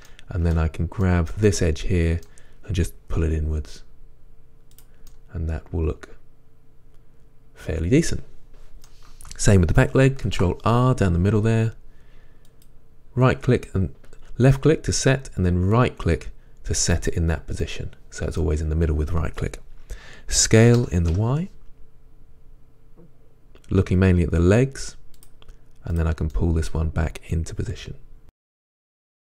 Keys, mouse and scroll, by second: 0.1 middle click, 1.2 middle click, 1.5 middle click, 2.0 middle click, 2.3-3.3 middle drag, 3.3 g, 5.2 middle click, 6.1 middle click, 6.7-12.7 middle drag, 10.3 ctrl+r, 17.7 middle click, 20.9 s, 26.1 click, 26.4-27.7 middle drag, 27.8 g, 28.3 click, 28.5 1, 28.7 click, 28.9 g, 29.0 drag, 29.1-29.2 shift+middle drag.